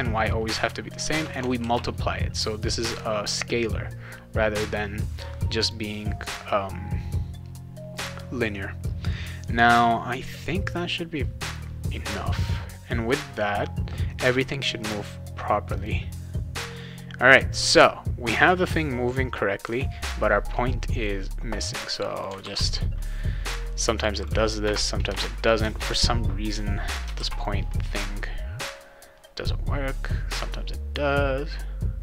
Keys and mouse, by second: 1.0 shift+8, 1.6 ctrl+s, 5.6 click, 11.4 click, 15.8 click, 20.9 click, 22.1 click, 22.4 ctrl+s, 24.2 click, 24.6 Return, 25.0 BackSpace, 25.6 BackSpace, 27.2 ctrl+s, 27.3 click.